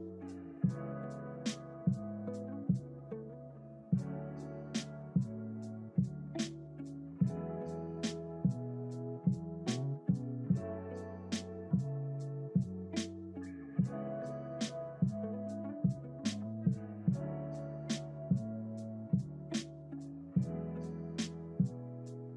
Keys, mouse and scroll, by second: 2.8 click, 4.3-5.6 scroll down 2, 5.6 click, 5.6 scroll down 1, 7.6-9.3 drag, 10.6 scroll up 2, 11.3-12.1 scroll down 2, 12.1 click, 14.6-17.9 shift+middle drag, 18.8 click, 19.9-22.3 drag.